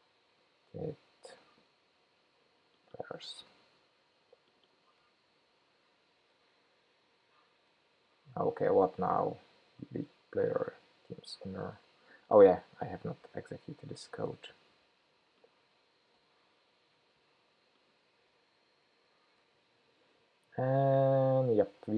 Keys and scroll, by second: 3.4 super+c, 5.3 super+v, 13.6 shift+super+p, 16.3 ctrl+k, 18.6 shift+super+p.